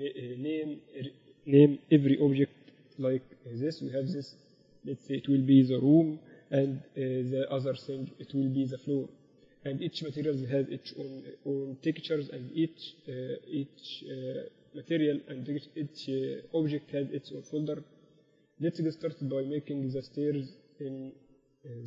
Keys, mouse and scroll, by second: 3.2 o, 4.4-6.4 right drag, 5.1-7.0 drag, 6.8 o.